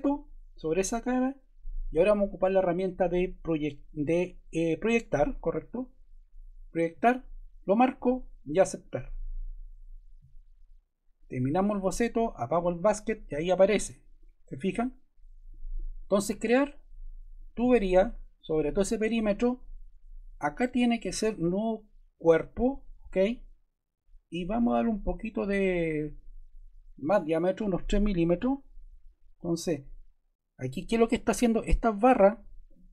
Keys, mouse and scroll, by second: 28.3 3.